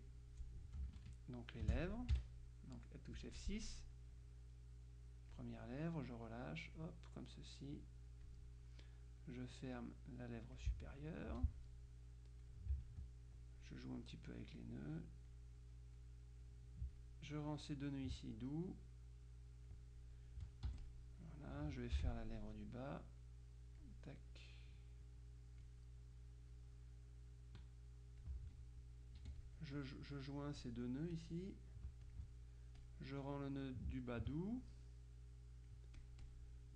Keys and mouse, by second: 0.9 space, 1.1-2.1 drag, 2.2 F6, 4.0-5.9 drag, 6.3-7.3 drag, 7.5-8.8 drag, 9.3-11.2 drag, 11.4 F2, 11.8-13.5 drag, 14.1-15.1 drag, 15.7 click, 17.0 ctrl+click, 17.7 click, 18.8-20.3 drag, 20.8 F1, 20.9 click, 22.1 F6, 23.1-26.2 drag, 26.6-28.8 drag, 29.3 F2, 29.5 click, 31.2 click, 32.1 ctrl+click, 32.9-33.9 drag, 34.1 ctrl+click, 34.8-36.7 ctrl+drag.